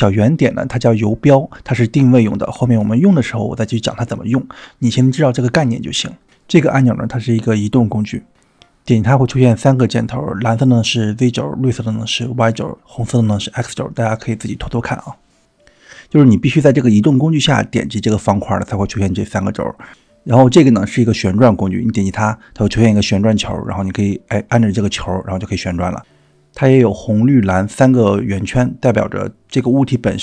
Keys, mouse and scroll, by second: 5.9 click, 10.2 click, 11.7 click, 12.7 click, 19.5-20.3 drag, 19.5 middle click, 20.3 scroll down 2, 21.2 click, 21.2 middle click, 22.7 click, 24.8-26.2 drag, 29.8 click.